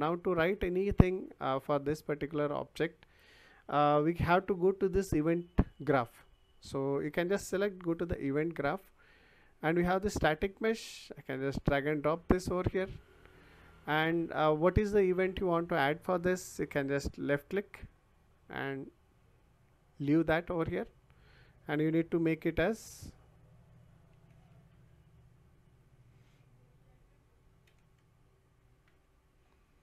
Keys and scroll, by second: 24.1 d, 24.7 e, 27.6 s, 28.8 t.